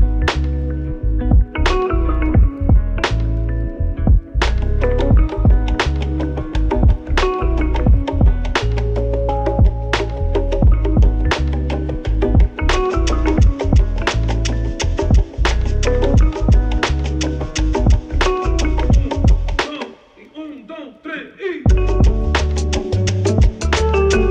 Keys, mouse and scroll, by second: 0.0-2.1 typing, 1.8-5.1 drag, 5.0-5.8 typing, 8.9 click, 20.8 click, 23.6-24.3 drag.